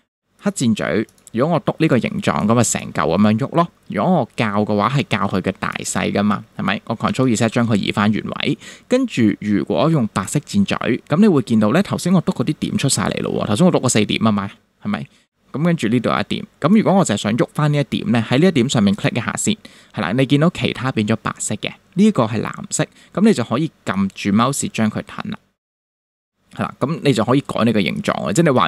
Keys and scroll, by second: 7.1 super+z.